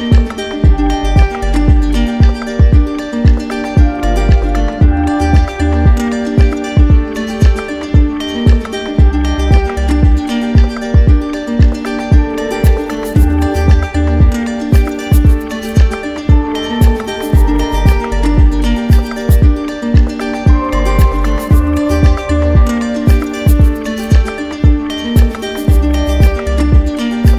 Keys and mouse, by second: 0.1 right click, 0.9 right click, 2.0 right click, 2.7 right click, 7.7-8.8 right drag, 10.7-11.8 right drag, 12.4 z, 14.8-15.9 right drag, 23.3-24.5 drag, 24.8-26.0 right drag.